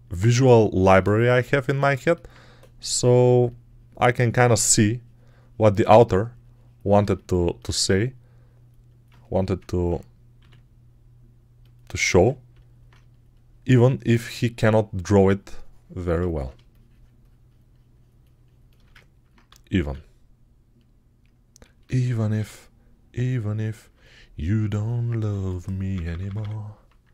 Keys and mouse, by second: 3.0 2, 9.2 g, 10.2 r, 12.1 ctrl+r, 19.7 q, 22.2 q, 25.2-26.2 typing.